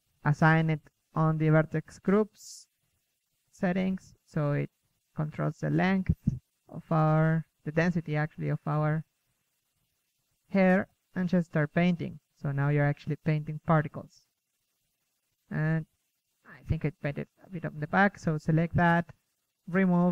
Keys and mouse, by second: 2.7-3.7 middle drag, 4.1-5.1 middle drag, 5.1 click, 6.1-6.7 middle drag, 6.7 ctrl+Tab, 7.0 KP_1, 9.5 KP_3, 9.8 KP_1, 10.6 click, 12.5 click, 13.1 KP_3, 15.9-16.4 drag, 16.4-17.4 middle drag, 18.4-19.0 drag, 19.0 Tab, 19.2 z, 19.4 a, 19.5 c.